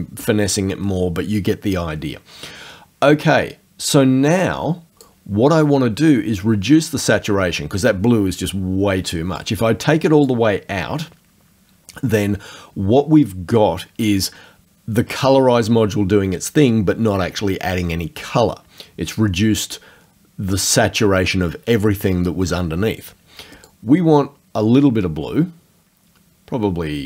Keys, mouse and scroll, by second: 4.3 click, 9.4 click, 23.7-27.0 drag.